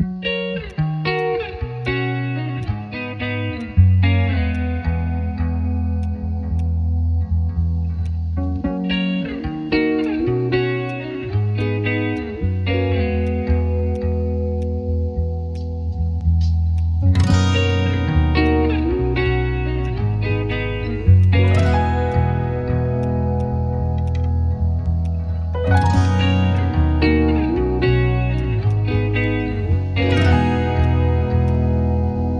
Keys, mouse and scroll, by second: 2.6 ctrl+click, 10.0 ctrl+click.